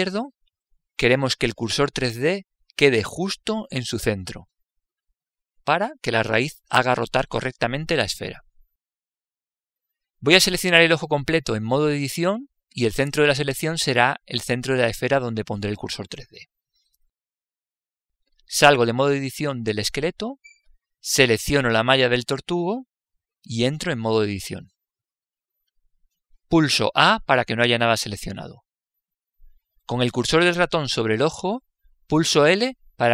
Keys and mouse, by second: 19.9 Tab, 22.1 right click, 24.5 Tab, 28.1 a.